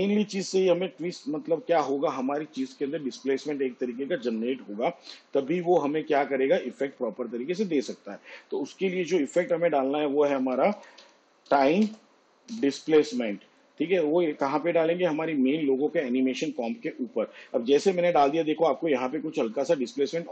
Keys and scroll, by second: 10.5-12.5 typing.